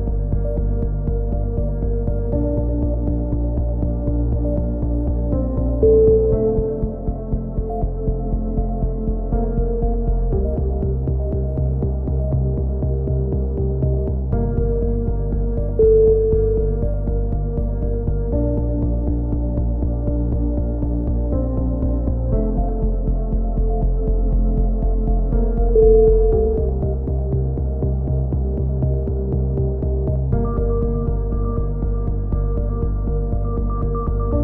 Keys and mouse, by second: 0.0 x, 1.0 z, 2.0 Tab, 2.9 Tab, 3.7 z, 6.0-8.2 middle drag, 9.4 k, 13.4-14.8 drag, 14.0 right click, 14.6 right click, 15.0 click, 16.3 middle click, 16.5-18.2 drag, 18.4 right click, 19.2 click, 20.7 right click, 21.1 click, 22.2 a, 22.5 middle click, 23.3 click, 23.8 middle click, 24.3 click, 24.5 a, 25.2 right click, 25.6 click, 26.7 a, 28.0 click, 28.7 middle click, 28.8-30.7 right drag, 30.7 shift+q, 32.3 click, 32.7 f, 33.0 a, 33.2 z.